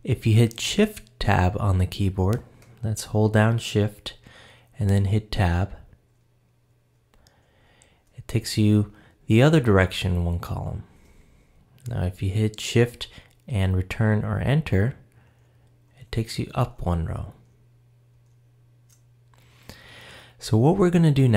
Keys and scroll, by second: 5.8 shift+Tab, 10.6 shift+Tab, 15.3 shift+Return.